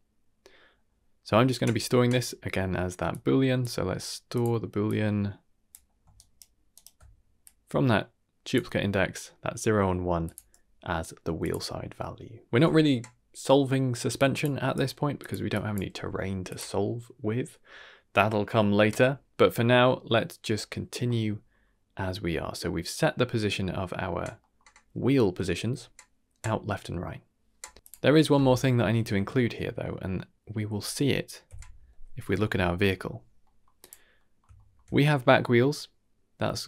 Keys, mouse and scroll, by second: 0.9 ctrl+z, 0.9 middle click, 0.9 scroll down 2, 3.1-4.4 drag, 4.8-5.7 drag, 6.1 ctrl+right click, 7.4-8.5 drag, 10.2 drag, 11.4 click, 12.4 middle click, 12.4 click, 12.4 x, 14.1-14.5 drag, 14.8 g, 15.5-15.8 drag, 15.9 g, 21.0 middle click, 21.3-22.0 scroll down 3, 21.6-22.0 middle drag, 24.4 middle click, 27.8 click, 28.7 middle drag, 29.3 shift+middle click, 31.4 KP_Divide, 32.2 middle drag, 32.6 shift+middle click, 32.9-33.4 scroll up 2, 33.4 middle drag, 33.8 click, 34.1 middle drag, 34.5 shift+middle drag.